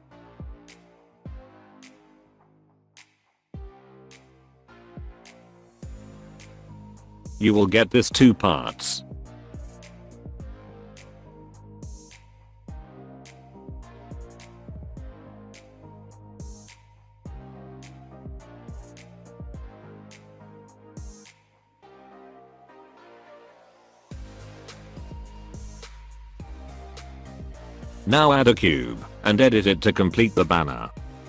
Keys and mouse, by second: 3.8 Tab, 4.5 Tab, 5.2 middle click, 5.8 Tab, 7.2 middle click, 8.0 middle click, 8.5 Tab, 9.0 alt+a, 9.2-9.7 middle drag, 10.3 middle drag, 11.7 click, 12.3-12.8 middle drag, 13.5 middle click, 15.9 click, 16.3-16.7 middle drag, 17.0 middle drag, 17.9 middle drag, 18.4 middle click, 19.1 shift+middle click, 19.7 shift+a, 20.8 click, 21.0 alt+middle click, 21.1 alt+middle click, 21.4 shift+middle click, 22.0 z, 22.8 z, 23.6 middle drag, 24.1 z, 24.4 middle click, 24.6 alt+middle click, 24.7 alt+middle click, 25.3 shift+a.